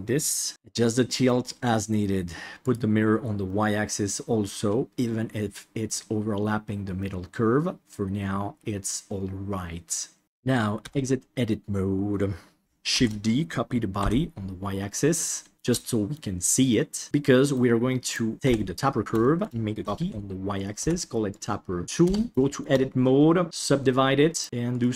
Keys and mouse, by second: 0.5-1.2 middle drag, 2.7 click, 3.4-5.8 middle drag, 7.0-10.2 middle drag, 10.8 Tab, 12.6 shift+y, 12.9 shift+d, 15.5 shift+middle click, 15.8-16.3 middle drag, 16.8 middle click, 18.0 right click, 18.4 KP_7, 19.2 shift+middle drag, 19.8 shift+d, 20.8 F2, 22.3 Tab, 22.4 shift+middle click, 23.4 w, 24.3 right click, 24.4 g.